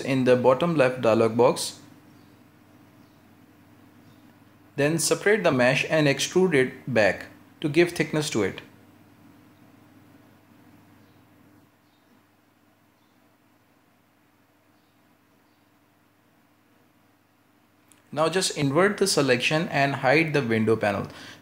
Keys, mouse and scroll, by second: 0.0 ;, 0.7 l, 4.1 middle click, 4.9 y, 6.6 g, 8.0 shift+middle click, 8.9 e, 11.2-14.2 middle drag, 16.3 l, 16.7 ;, 17.0 l, 18.3 ctrl+KP_Add, 18.6 ctrl+KP_Add, 18.7 ctrl+KP_Add, 18.9 ctrl+KP_Add, 19.1 ctrl+KP_Add, 19.3 ctrl+KP_Add, 19.5 ctrl+KP_Add, 20.3 ctrl+i.